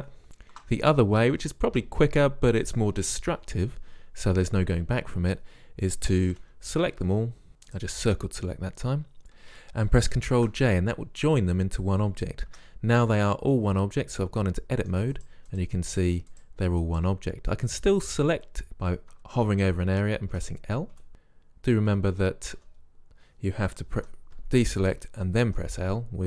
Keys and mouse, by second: 6.4 c, 7.9 drag, 9.6 middle click, 10.4 ctrl+j, 12.6 Tab, 13.3 click, 19.2 a, 20.4-23.0 typing, 24.1 a, 25.6 l.